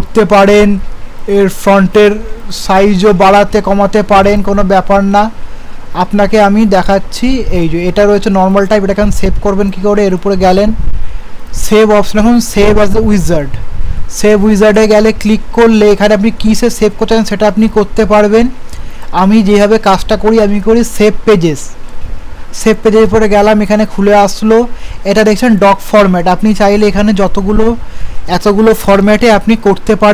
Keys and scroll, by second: 6.0 ctrl+z.